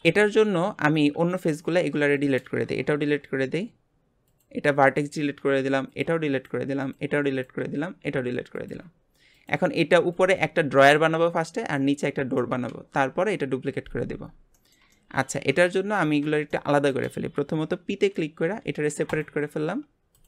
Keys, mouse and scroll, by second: 1.1 Tab, 1.4 click, 1.8 Tab, 2.0 click, 3.0 Delete, 5.0 click, 5.4 Delete, 6.3 click, 6.5 Delete, 7.3 click, 7.6 Delete, 9.3 click, 14.6 shift+middle click, 15.3 Tab, 15.7 shift+middle click, 16.2 Tab, 16.5 middle click, 17.3-17.6 scroll up 2, 18.4 p, 19.7 Tab, 20.1 click.